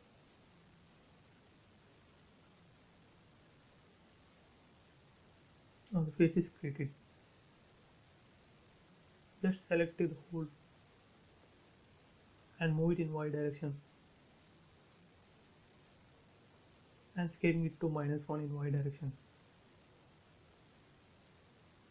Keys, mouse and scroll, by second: 0.4 space, 1.1 l, 1.6 click, 2.3 space, 2.8 scroll up 1, 3.0 e, 3.3 click, 4.0 space, 4.4 click, 5.3-6.2 scroll down 1, 6.7 middle click, 7.4-8.0 scroll up 1, 8.0 click, 9.0 right click, 10.6 click, 11.2 scroll down 1, 12.1 shift+middle click, 13.3 m, 13.7 ctrl+click, 15.4 Left, 15.9 click, 16.2 space, 16.9 s, 17.6 click, 18.9-19.6 typing, 19.4 Return, 20.7 scroll up 1, 21.0 shift+middle click.